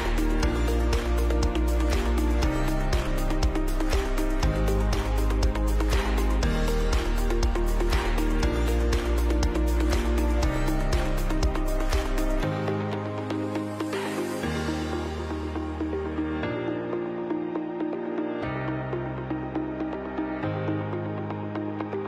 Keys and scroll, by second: 0.0-14.1 typing, 17.6 ctrl+x, 19.4 ctrl+x.